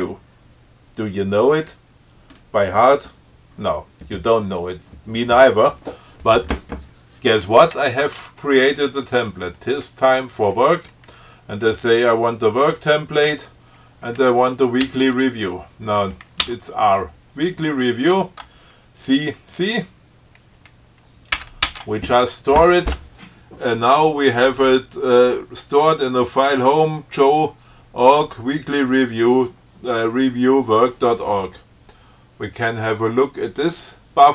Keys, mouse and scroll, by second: 7.9 F6, 13.5 w, 15.1 w, 16.7 r, 21.6 ctrl+c, 33.0 click.